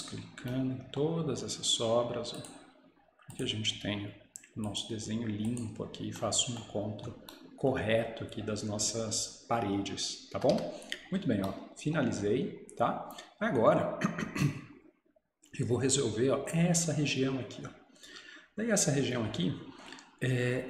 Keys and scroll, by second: 10.6 Escape.